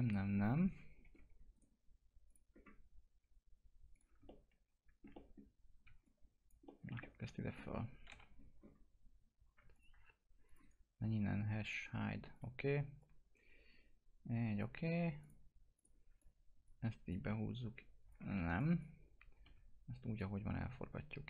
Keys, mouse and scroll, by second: 1.0 1, 1.5 right click, 2.3 click, 2.5-3.9 scroll down 1, 3.9 click, 4.2 alt+middle click, 5.4-5.8 scroll down 1, 5.8 w, 6.0 click, 6.6 middle click, 6.9 middle click, 7.0 alt+middle click, 8.0 t, 8.5-9.6 scroll down 1, 9.7 ctrl+click, 10.6 right click, 11.6 click, 17.1 click, 18.3 ctrl+z, 18.5 click, 19.4 e, 20.1-21.2 drag.